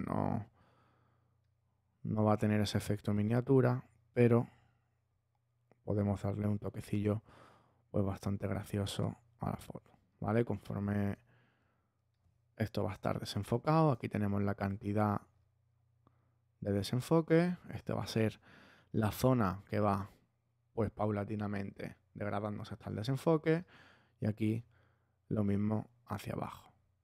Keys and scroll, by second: 8.9 space, 13.3 space, 23.1-24.1 typing.